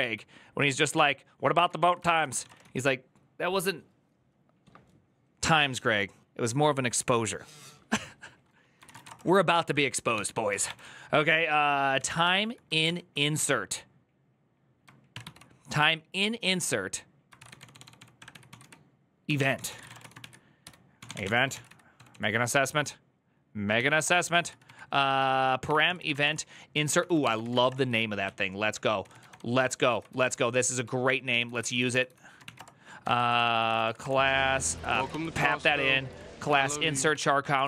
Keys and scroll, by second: 0.5-2.9 typing, 8.5-10.4 typing, 11.5-12.5 typing, 12.6 ctrl+n, 14.9 ctrl+n, 17.1 ctrl+c, 17.3-21.9 typing, 23.5-24.5 typing, 25.5 Tab, 25.6 ctrl+c, 25.6-35.8 typing, 28.0 ctrl+o, 32.3 Return, 34.5 ctrl+c, 34.7 ctrl+c, 35.2 Return, 36.2 Tab, 36.5 ctrl+c, 36.9 o.